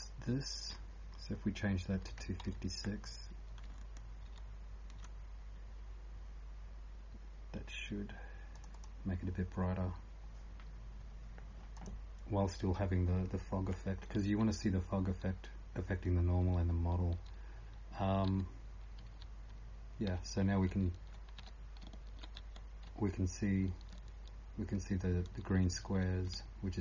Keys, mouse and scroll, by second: 0.0-26.8 typing, 2.0 click, 2.0 scroll down 2, 4.3 ctrl+s, 8.7 click.